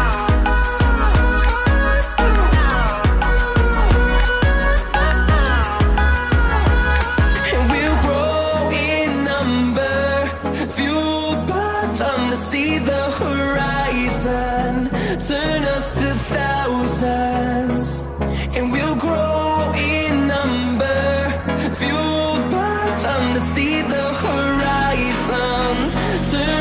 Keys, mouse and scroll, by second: 1.4 click, 8.1 click, 15.3-17.9 drag, 17.9-23.1 drag, 23.1 click, 23.2-26.6 drag.